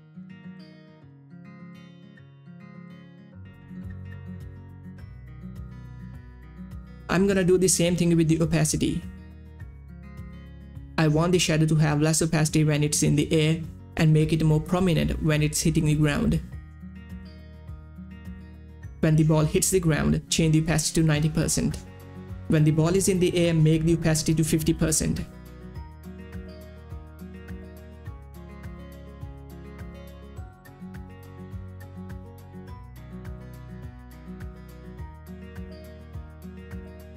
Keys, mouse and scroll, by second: 0.2 click, 2.4 click, 7.8 space, 8.2-10.9 drag, 11.2 Right, 14.2 Right, 14.2 click, 14.7 t, 19.7 t, 19.7 click, 22.6 9, 22.8 Return, 23.5 click, 24.1 5, 24.2 Return, 24.5 click, 24.7 Page_Down, 25.8 click, 26.2 Page_Down, 26.7 click, 26.9 5, 27.1 Return, 27.3 Page_Down, 28.0 click, 28.1 9, 28.2 Return, 28.8 Page_Down, 29.2 click, 29.7 5, 29.9 Return, 30.0 Page_Down, 30.4 click, 30.5 9, 30.6 Return, 31.3 Return, 31.7 Page_Up, 31.9 click, 32.5 5, 32.7 Return, 32.8 Page_Down, 33.2 Page_Up, 33.3 Page_Down, 33.5 click, 33.6 9, 33.9 Return, 34.1 Page_Down, 34.5 Page_Up, 34.6 click, 35.8 click, 35.9 Return, 36.0 Page_Down, 36.5 click, 36.7 9, 36.9 Return, 37.0 Page_Down.